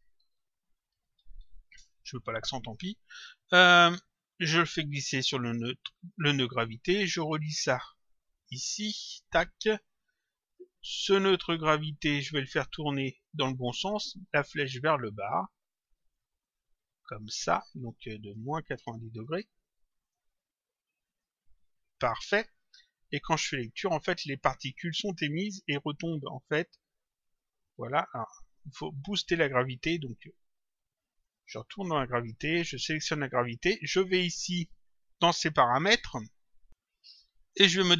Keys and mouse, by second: 0.0-1.8 typing, 3.5 click, 7.5 click, 10.4 click, 11.8 click, 12.9 click, 14.5 click, 16.1 click, 20.0 click, 21.1 click, 23.2 click, 24.9 click, 28.5 click, 31.1 click, 32.6 click, 33.9 click, 36.5 click.